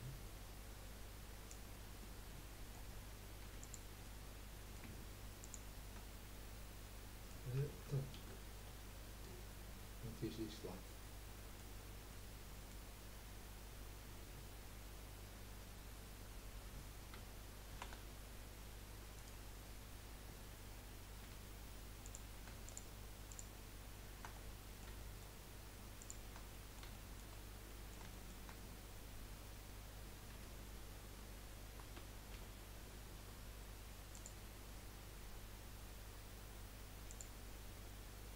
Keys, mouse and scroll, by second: 2.0-3.4 middle drag, 3.4 3, 3.6 click, 4.0-5.4 middle drag, 5.4 shift+click, 6.8-8.2 middle drag, 8.2 ctrl+z, 8.7 ctrl+z, 9.7-11.7 middle drag, 11.7 scroll up 1, 12.1-15.2 middle drag, 17.7 shift+r, 19.1-21.3 right drag, 21.3 2, 22.0 click, 22.6 shift+click, 23.3 shift+click, 24.3-26.0 middle drag, 26.0 shift+click, 26.5-30.3 middle drag, 30.3 F3, 37.1-38.3 drag.